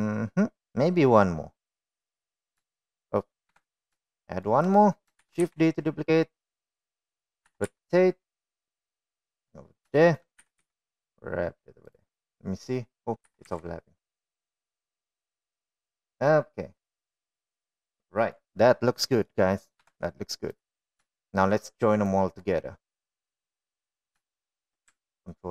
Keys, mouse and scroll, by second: 0.4-0.8 shift+middle drag, 3.7-4.1 shift+middle drag, 4.7 KP_1, 5.4 shift+middle drag, 6.4 shift+d, 7.8-8.2 middle drag, 8.7 r, 11.3 shift+middle click, 11.6 g, 13.5-14.2 middle drag, 14.5 r, 17.6-19.6 middle drag, 20.4 middle click, 21.1 KP_1, 21.9 click, 22.4-22.7 shift+middle drag, 23.4-24.7 drag.